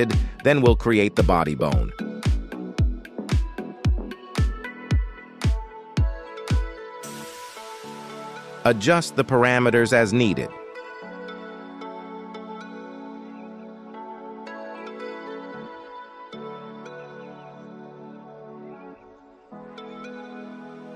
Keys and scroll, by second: 6.7 KP_1.